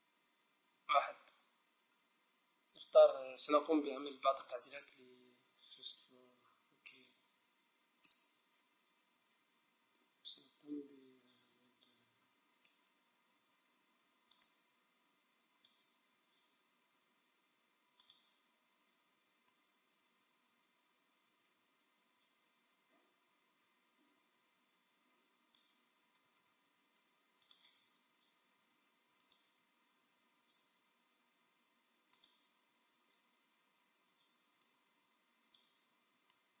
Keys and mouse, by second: 0.7 KP_1, 2.9 KP_7, 6.2-7.9 middle drag, 10.9 a, 11.9-14.0 middle drag, 13.3 b, 18.0-21.1 drag, 25.9-27.4 middle drag, 27.4-29.1 right drag, 29.2-30.8 right drag, 30.3 x, 34.1 b, 36.2-36.6 drag.